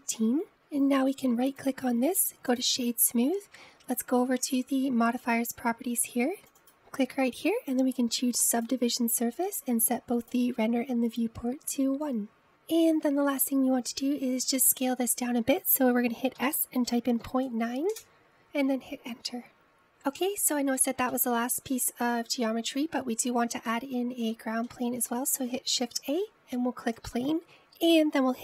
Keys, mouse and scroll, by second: 2.6-5.7 right drag, 6.3 click, 7.7-10.7 drag, 11.3-12.4 drag, 17.5 s, 21.9-26.7 middle drag, 26.7 shift+a.